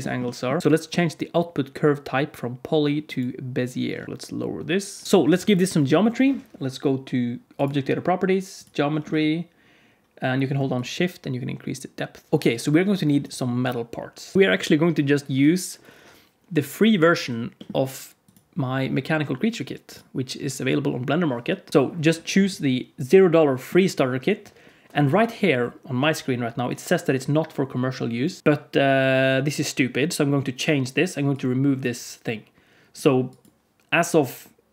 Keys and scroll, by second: 5.2 alt+a.